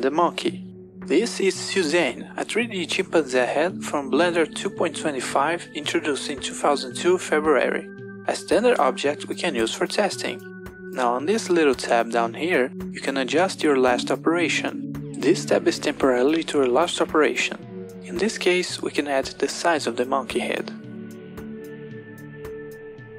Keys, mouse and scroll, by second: 3.6 click, 4.2 n, 12.2 click, 17.5-19.2 drag, 20.1 click.